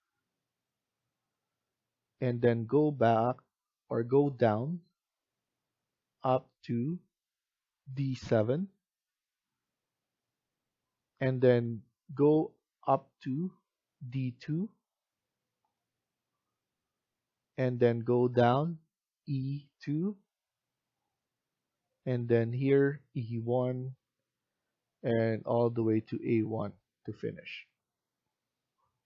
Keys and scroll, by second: 28.9 Escape.